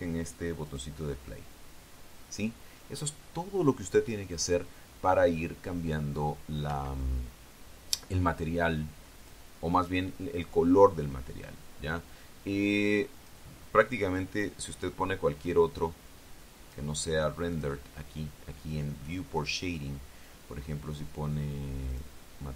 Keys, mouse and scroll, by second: 1.5 click, 7.5 Escape, 10.0 click, 14.0 click, 15.0-17.7 drag, 18.3 click.